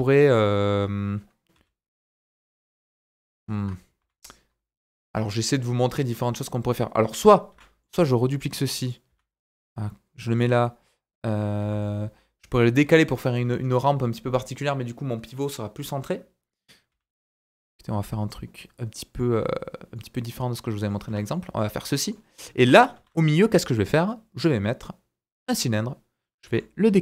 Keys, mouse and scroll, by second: 1.5 e, 4.0 ctrl+z, 7.5 shift+d, 9.1 s, 11.6 g, 12.7 right click, 14.6-26.7 right drag, 16.9 s, 19.5-19.9 scroll down 3, 19.9 middle click, 21.1 Tab, 21.3 middle click, 21.6 scroll up 2, 22.0 middle click, 22.6 KP_1, 22.9 shift+a, 26.4 g, 26.7-27.0 ctrl+drag.